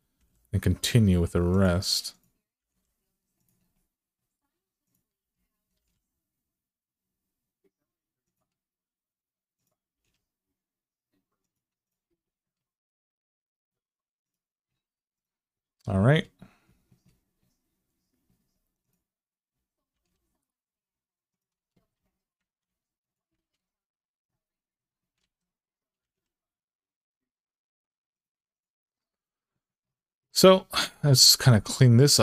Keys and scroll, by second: 2.4 g, 5.5 g, 9.7 g, 19.7 g, 21.6 alt+z, 25.8 g, 30.8 alt+z.